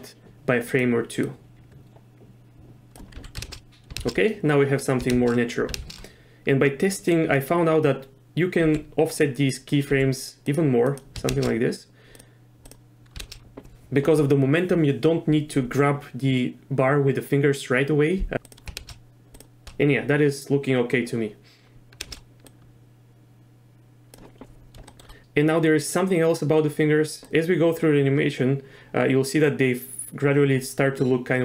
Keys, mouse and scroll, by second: 1.2-3.0 drag, 3.1 z, 3.5 shift+space, 4.0 shift+space, 4.8 click, 5.1 shift+space, 5.8 shift+space, 6.9 click, 8.7 g, 9.5 click, 10.0 g, 10.9 click, 11.3 shift+space, 12.1 click, 12.6 click, 13.2 shift+space, 18.5 click, 18.8 shift+space, 19.3 click, 19.6 shift+space, 22.0 shift+space, 22.5-24.1 drag, 24.9 shift+click, 27.2-31.4 drag.